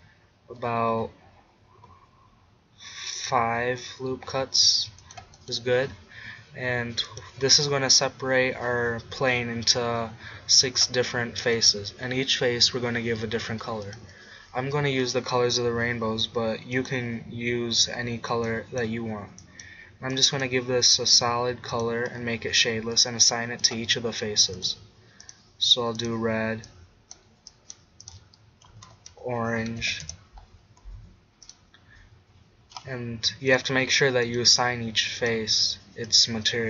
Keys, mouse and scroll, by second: 5.5-8.9 drag, 11.6-13.5 drag, 13.9-18.6 drag, 21.5 middle click, 21.7-23.7 drag, 23.7-25.3 middle drag, 25.3-27.7 drag, 31.5-33.2 drag, 33.2 middle click, 33.5 click, 35.9-36.6 drag.